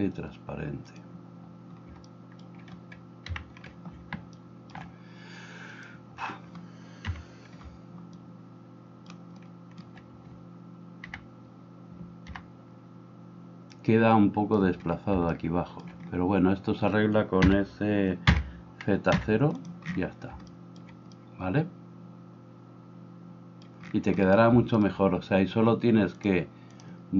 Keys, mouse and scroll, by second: 0.9-5.8 middle drag, 3.3 KP_1, 5.8-19.6 drag, 7.2 KP_1, 11.1 b, 19.6-26.2 middle drag, 26.2-27.1 drag.